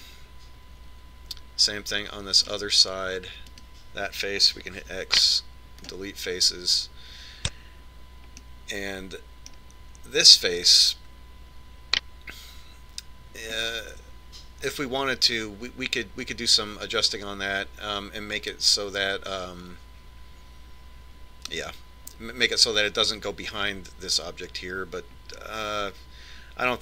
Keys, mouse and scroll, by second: 5.0 right click, 6.4 x, 10.2-11.9 middle drag, 11.9 right click.